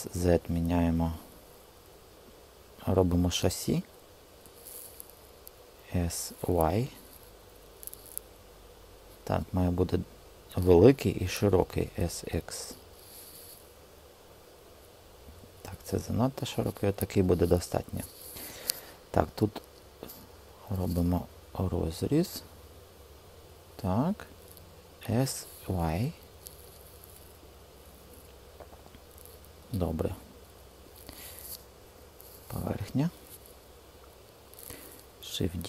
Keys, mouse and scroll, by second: 5.7 s, 6.4 y, 11.5 s, 12.0 x, 19.8 ctrl+r, 24.3 s, 25.4 y, 35.3 shift+d.